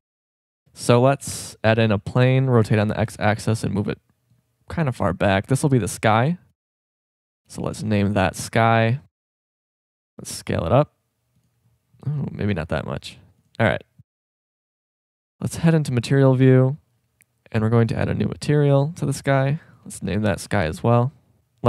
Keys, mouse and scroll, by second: 0.5 shift+c, 1.6 shift+a, 2.5 r, 9.0 KP_0, 10.1 s, 12.5 s, 15.4 drag, 17.9-19.2 drag, 20.6 click, 21.4 Delete.